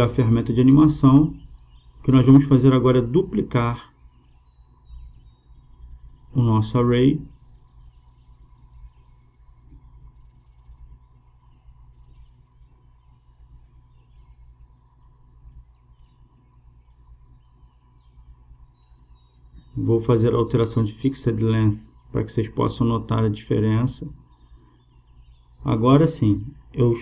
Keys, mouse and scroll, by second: 1.5-3.2 drag, 5.9-7.7 right drag, 7.8-9.5 drag, 8.8-10.4 right drag, 9.8 shift+d, 11.2-13.0 drag, 13.3-15.0 drag, 19.1-22.8 drag, 26.5-27.0 drag.